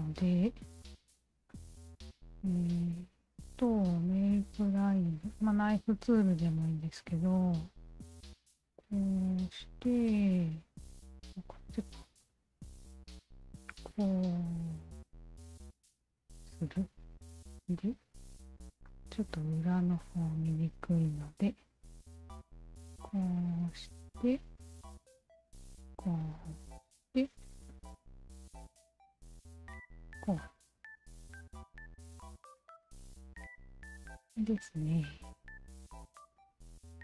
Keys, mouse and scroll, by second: 0.2 alt+click, 1.3 d, 2.0 alt+middle click, 2.3 alt+right click, 2.8 alt+middle click, 3.8 shift+q, 5.0 click, 7.6 click, 9.1 click, 11.9 click, 13.5 click, 14.8 click, 16.5 Return, 17.9 right click, 18.9-20.5 alt+drag, 21.9 alt+click, 23.0 alt+click, 24.2 alt+click, 25.5 alt+click, 27.1 alt+click, 28.6 Return, 29.8 q, 30.4 alt+click, 31.7-32.4 right drag, 33.0 d, 33.4 alt+click, 34.9 alt+click, 36.2 shift+v.